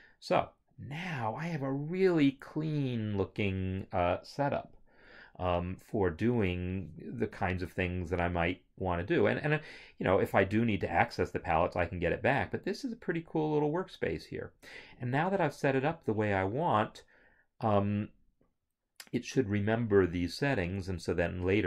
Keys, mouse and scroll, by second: 10.3 scroll.